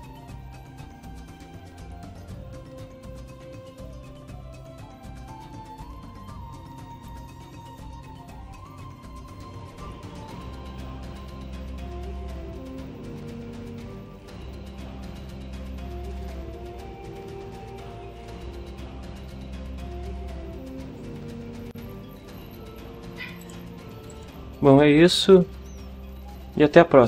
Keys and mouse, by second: 23.4 click, 24.1 click.